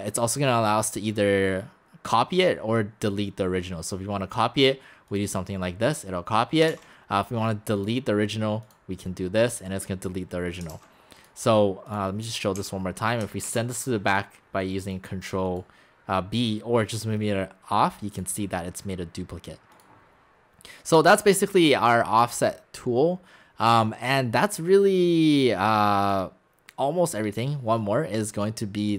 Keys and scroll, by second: 10.7 ctrl+z, 12.6 x, 13.5 ctrl+b.